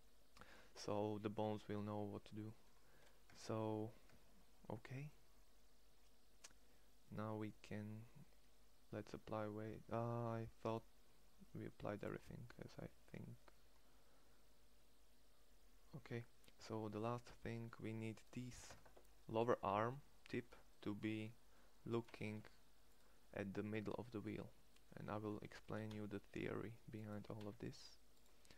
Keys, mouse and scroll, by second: 2.9 Tab, 3.7 Tab, 18.5 Tab, 21.8 shift+s, 23.2 middle click, 23.8 middle click, 24.0 middle click, 25.2 g, 26.8 g, 28.4 g.